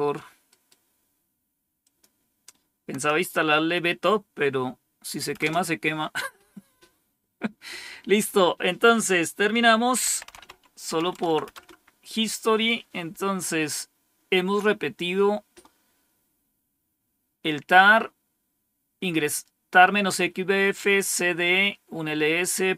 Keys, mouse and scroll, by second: 0.3 right click, 1.7 click, 2.9 Tab, 5.3 Return, 9.9-11.3 typing, 11.4 Return.